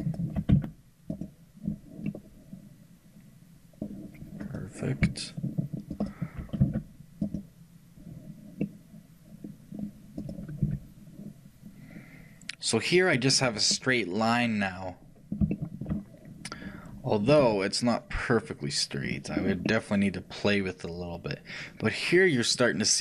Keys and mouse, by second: 0.6 shift+x, 2.1-4.1 middle drag, 4.5-8.6 right drag, 6.7 shift+x, 8.7-10.4 middle drag, 10.4-13.8 right drag, 13.8-19.0 middle drag, 17.5 shift+g, 19.4-23.0 middle drag.